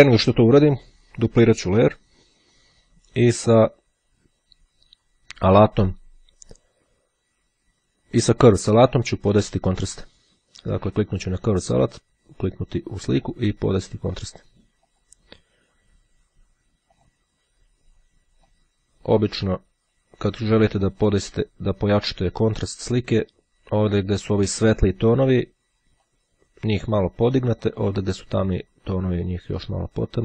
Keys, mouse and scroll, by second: 1.5-2.5 drag, 9.0 click, 11.1 click, 11.9 click, 15.0 click, 17.0 click, 18.5-20.1 drag, 21.1-25.0 drag, 26.0-28.3 drag, 28.6-30.2 drag.